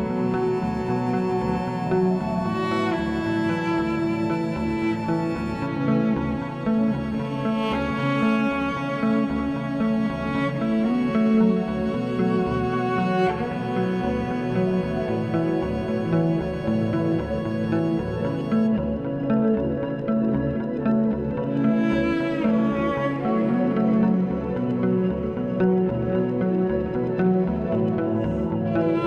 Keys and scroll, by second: 9.7 3, 12.8 s, 15.1 s, 18.2 s, 23.7 s.